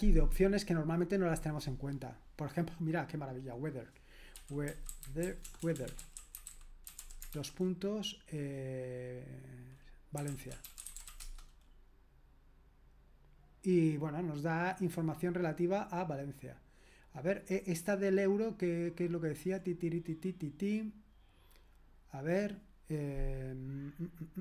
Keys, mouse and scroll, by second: 2.9-4.3 drag, 4.1-7.8 typing, 9.9-11.6 typing.